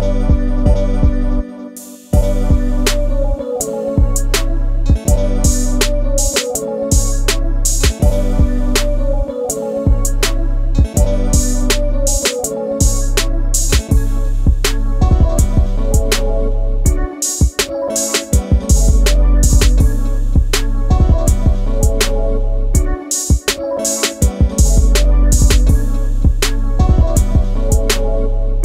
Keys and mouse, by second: 1.5 KP_7, 2.5 click, 4.2-7.1 drag, 7.5-9.3 middle drag, 10.1-11.8 middle drag, 12.5 click, 14.7 KP_1, 15.6 shift+a, 17.2-17.7 middle drag, 17.9 Tab, 18.2 click, 19.1 Delete, 20.3 click, 21.1 ctrl+z, 21.4 ctrl+z, 23.0 click, 23.4 click, 24.4 Delete, 25.0 click, 25.7 KP_7, 26.5 g, 27.0 click, 27.7 KP_1, 28.4-28.6 drag.